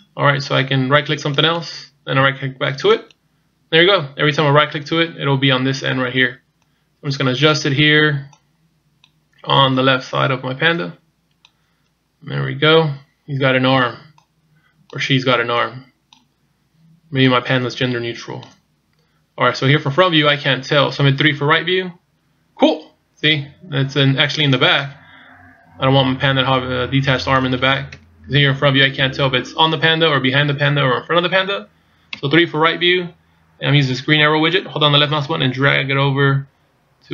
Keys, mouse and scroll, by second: 1.4 right click, 3.0 right click, 6.6 click, 8.3 click, 9.8 click, 12.3-12.7 scroll down 2, 12.9 scroll up 2, 14.2 click, 15.6 click, 17.3 click, 20.2 scroll down 1, 21.5 KP_3, 24.8 middle click, 27.9 KP_1, 32.1 KP_3, 35.1 click.